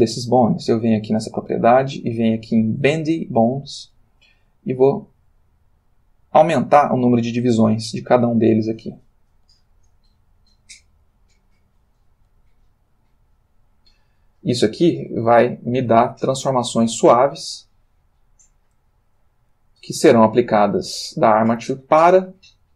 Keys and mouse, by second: 1.0 click, 2.8 click, 4.7 click, 5.4 click, 9.5 click, 10.0 click, 10.9 click, 12.1 click, 14.6 r, 15.7 click, 16.2-16.7 drag, 16.7 r, 19.3 click, 19.9 click, 20.1 r, 21.5 click.